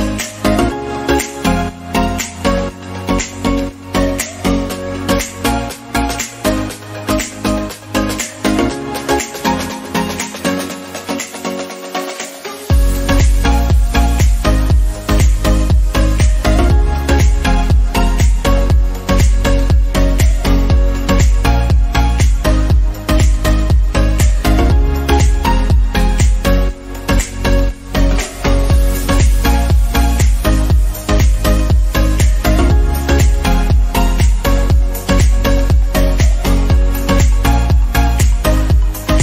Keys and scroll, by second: 10.5 ctrl+j, 19.7 ctrl+0.